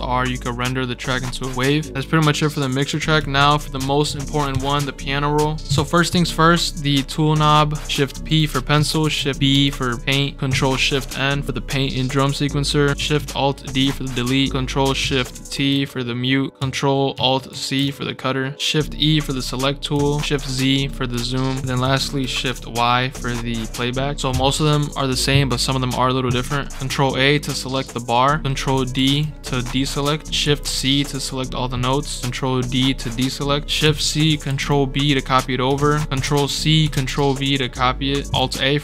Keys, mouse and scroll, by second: 2.9 click, 3.9 ctrl+right click, 4.5 right click, 8.1-9.8 typing, 11.4 scroll down 2, 13.6 alt+shift+d, 15.3 ctrl+shift+t, 17.5 ctrl+alt+c, 20.3 scroll down 4, 21.6 right click, 22.2 shift+y, 24.3 right click, 28.9 ctrl+d, 30.4 shift+c, 33.8 shift+c, 34.4 ctrl+b, 35.8 ctrl+z, 36.2 ctrl+c, 36.9 ctrl+v, 38.2 alt+a.